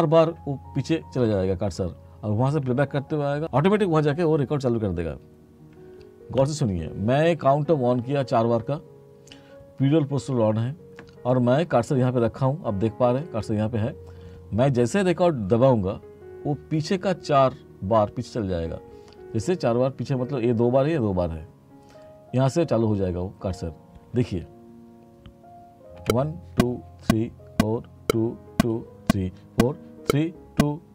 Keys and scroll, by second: 26.1 3.